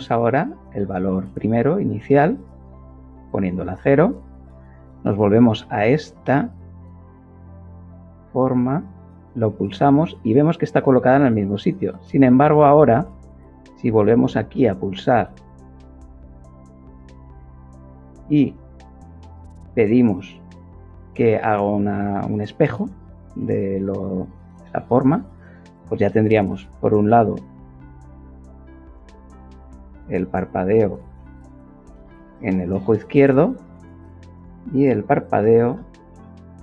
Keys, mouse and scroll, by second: 0.1 click, 2.4 click, 4.4 click, 7.0 click, 13.2 click, 19.7 click, 27.6 click, 29.5-32.1 typing, 32.6 Return, 34.0 click, 34.1 click, 34.6 click, 36.0 shift+r.